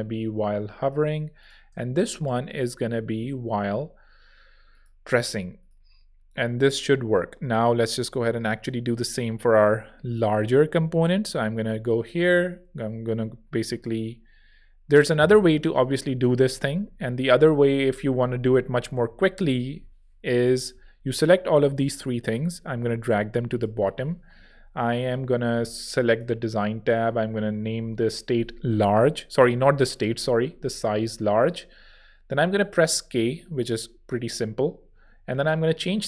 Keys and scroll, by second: 1.7 shift+e, 7.8 v, 12.4 Page_Up, 16.2 super+z, 18.2 super+z, 18.9 shift+super+z, 19.7 alt+shift+super+z, 20.6 alt+shift+l, 24.4 alt+shift+super+[, 26.9-28.1 typing, 29.3 super+z, 30.2 shift+super+z, 30.2-31.4 typing, 32.8 k, 34.8 Tab.